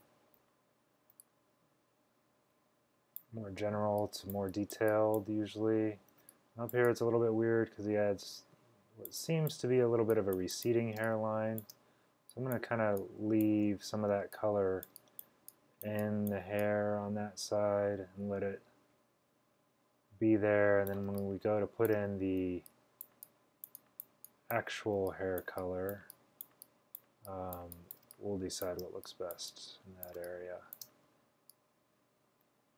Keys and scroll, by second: 0.0 super+z, 1.2 typing, 3.9 x, 6.2 x, 11.1 space, 11.6 space, 11.6 space, 11.7 space, 14.2 x, 21.1-22.5 typing, 25.1 x, 28.1 space, 28.6 space, 28.7 space, 28.8 space, 30.2 space, 30.7 space, 30.8 space.